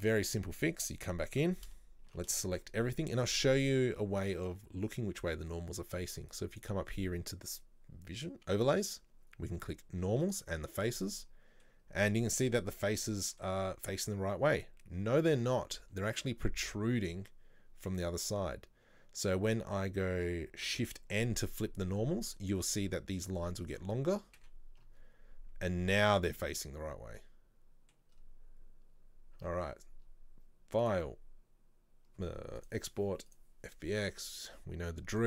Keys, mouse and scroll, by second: 0.0 click, 0.7 middle click, 1.1-1.5 scroll up 1, 1.5 Tab, 2.2 a, 2.5-10.3 shift+middle drag, 10.3 click, 10.8-11.3 scroll up 2, 11.3-14.0 middle drag, 14.0-15.2 scroll up 1, 15.2-16.7 scroll up 1, 16.7-18.5 scroll up 1, 18.5-19.6 scroll up 1, 19.6 a, 24.5 shift+n, 26.7-27.3 scroll down 2, 27.3 middle click, 28.2-28.7 scroll up 1, 29.1-29.5 scroll down 1, 29.5 Tab, 34.6 click.